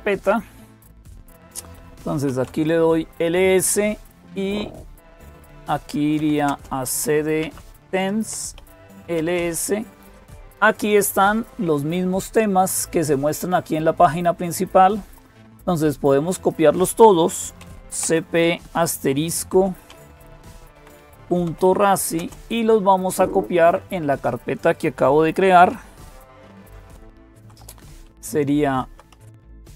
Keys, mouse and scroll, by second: 0.0-29.7 typing, 16.1 click.